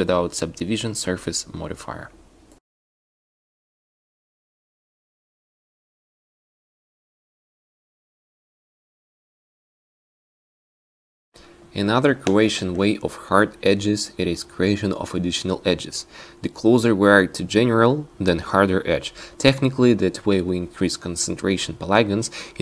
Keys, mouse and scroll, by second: 7.7 Tab, 8.5 Tab, 12.3 Tab, 12.8 Tab, 13.5 ctrl+z, 13.8 ctrl+z, 14.0 ctrl+z, 14.4 ctrl+z, 14.7 Tab, 17.1 ctrl+r, 18.4 ctrl+r, 20.4 ctrl+r.